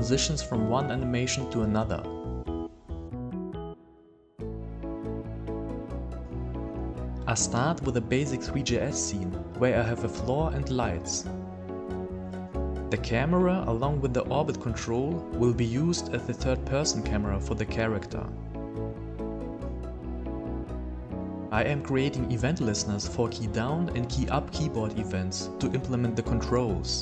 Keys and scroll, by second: 0.0 a, 2.4 d, 3.7 a, 4.7 s.